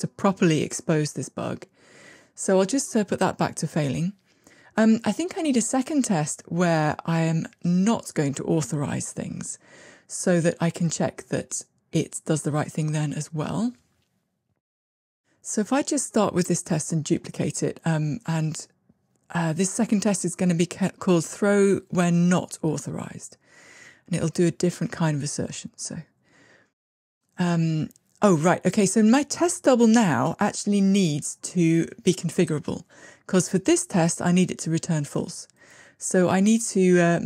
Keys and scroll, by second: 4.7 shift+Escape, 11.2 alt+shift+Up, 14.6 super+d, 23.3 super+x.